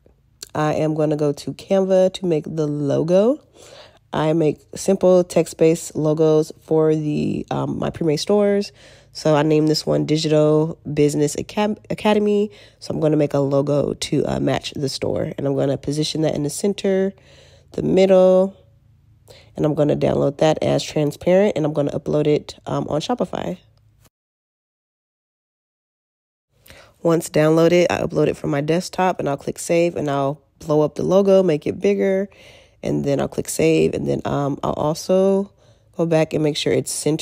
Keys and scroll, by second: 19.2 alt+q.